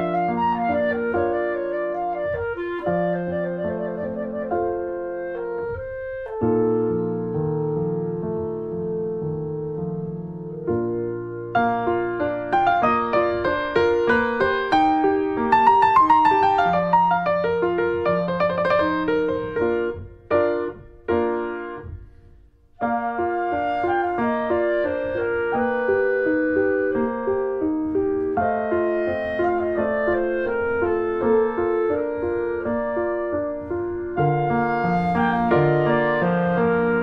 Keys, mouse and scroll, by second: 8.3 click, 8.5-9.8 middle drag, 9.8 click, 10.5-12.4 middle drag, 12.4 ctrl+s, 13.4 middle click, 13.6 click, 13.9 middle click, 14.3 scroll up 1, 14.6 middle click, 15.5 click, 15.6 middle click, 16.0 scroll down 1, 16.1-17.6 middle drag, 17.6 click, 18.8 scroll up 2, 19.1 shift+middle click, 19.4 shift+d, 19.9 r, 24.0 alt+middle click, 24.8 middle click, 25.5 Tab, 25.6 Tab, 25.9 click, 26.1 alt+middle click, 26.7 shift+middle click, 27.6 click, 28.6-29.8 middle drag, 29.8 r, 30.9 alt+middle click, 31.1 alt+middle click, 31.4 r, 32.9 click, 34.4 middle click, 34.9 scroll up 1, 35.1 click, 35.3 middle click, 35.7 click, 36.3 middle click, 36.9 click.